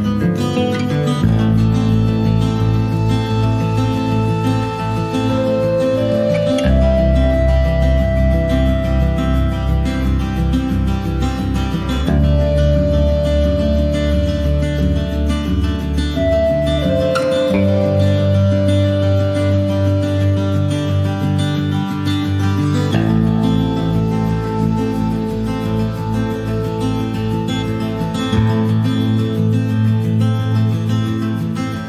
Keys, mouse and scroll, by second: 0.1 middle click, 0.8 click, 1.7 click, 1.9-3.4 middle drag, 2.4 ctrl+s, 3.4 ctrl+s, 3.6 click, 3.8 middle click, 4.1-5.3 middle drag, 5.3 ctrl+s, 5.6 click, 6.4 ctrl+s, 6.6 scroll up 1, 6.9 shift+middle click, 7.3 shift+a, 9.0 shift+a, 27.3 click, 27.7 shift+a, 29.9 scroll up 2, 30.7 middle click, 31.4 scroll down 2, 31.7 shift+middle click.